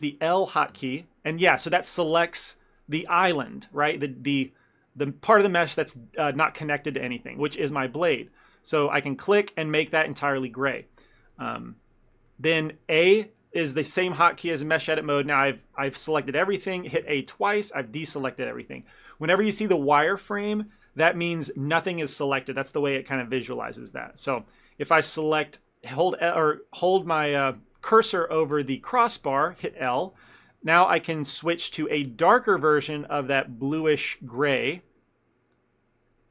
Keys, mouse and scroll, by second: 0.8 l, 7.1 middle click, 8.5 click, 12.2 ctrl+middle click, 12.7 a, 17.1 a, 18.5 shift+middle click, 19.4 middle click, 24.2 ctrl+middle click, 24.6 shift+middle click, 30.2 l, 32.7 click, 35.6 click.